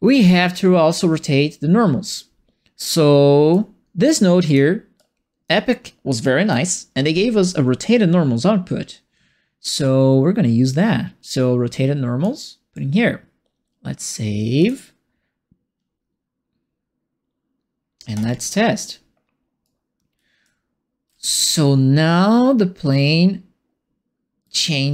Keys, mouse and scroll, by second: 0.2 click, 2.8 click, 4.4 click, 4.9 click, 6.2 right click, 10.6-12.2 drag, 14.5 click, 19.6-24.9 right drag, 20.1 e, 20.4 w, 21.2 d.